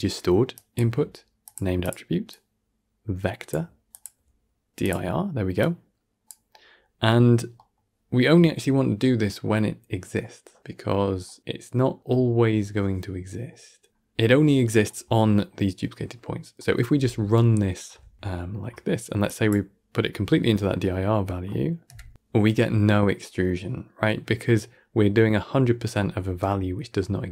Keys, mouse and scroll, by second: 2.2-5.6 drag, 7.0-7.4 scroll up 2, 7.4-10.6 middle drag, 13.9-14.3 scroll down 10, 14.3-18.1 middle drag, 18.1 shift+space, 18.2 middle click, 18.5-19.2 scroll up 2, 19.2 click, 20.0-20.7 scroll down 15, 20.8-21.8 shift+middle drag, 21.8 shift+space, 26.1 shift+space.